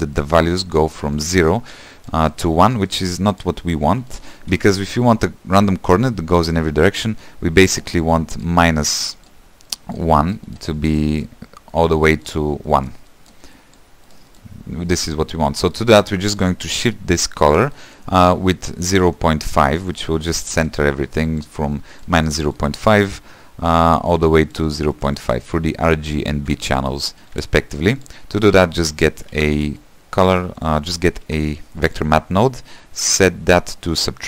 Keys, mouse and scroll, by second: 27.8 q, 28.4 click, 29.3 ctrl+z, 30.2 click, 33.7 click.